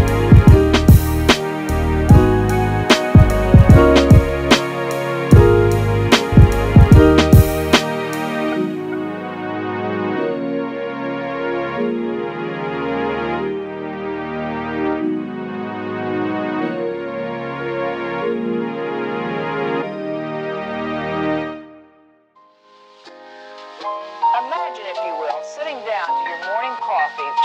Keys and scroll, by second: 25.1 f.